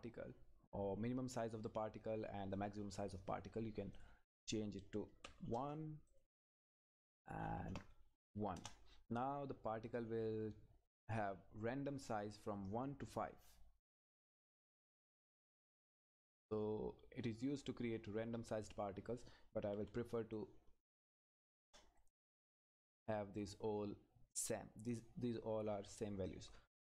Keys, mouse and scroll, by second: 2.0 scroll up 1, 3.9 click, 5.5 Return, 6.1 click, 8.5 Return, 16.3 click, 20.3 click, 21.6 Return, 22.8-26.2 drag.